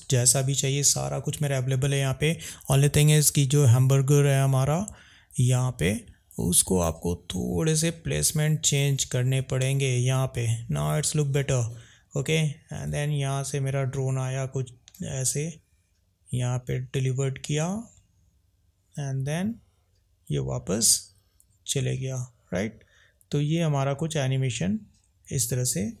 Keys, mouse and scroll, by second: 6.6 click, 7.9 drag, 13.3 drag.